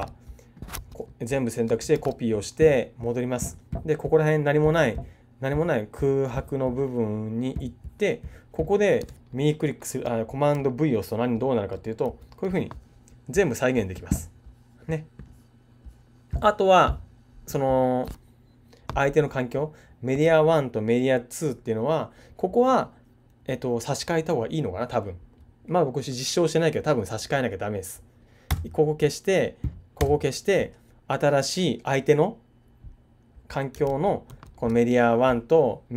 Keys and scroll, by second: 0.7 super+a, 1.9 super+c, 12.0 super+v, 33.8 super+z.